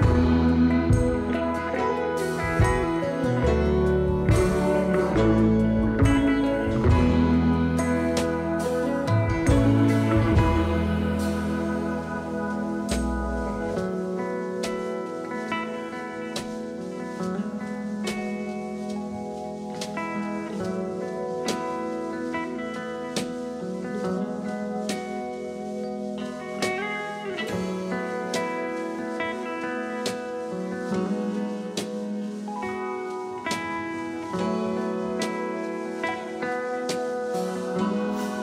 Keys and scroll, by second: 1.6 w, 2.7 alt+q, 12.4 s, 19.4 w, 34.9 alt+e, 36.1 s.